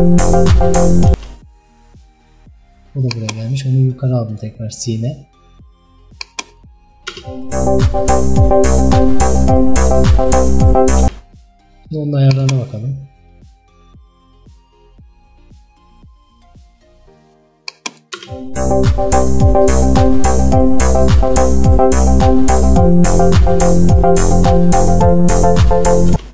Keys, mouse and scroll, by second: 1.2 space, 4.5 click, 6.3 click, 7.2 space, 11.1 space, 15.1-18.2 drag, 18.2 space, 26.2 space.